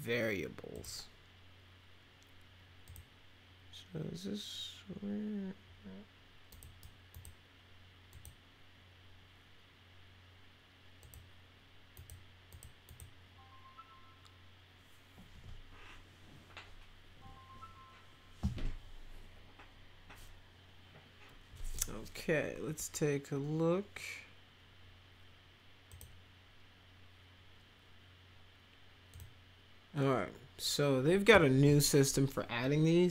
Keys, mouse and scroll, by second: 0.7 click, 2.8 click, 6.5 click, 6.5 right click, 7.1 click, 8.1 click, 11.0 click, 11.9 click, 12.5 click, 12.9 click, 25.9 click, 29.1 click.